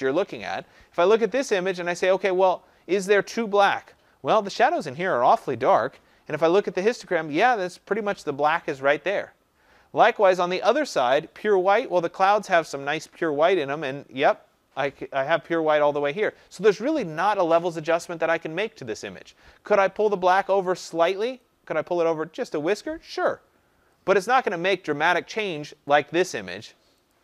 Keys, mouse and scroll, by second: 22.6 click, 25.9 click, 27.1 click.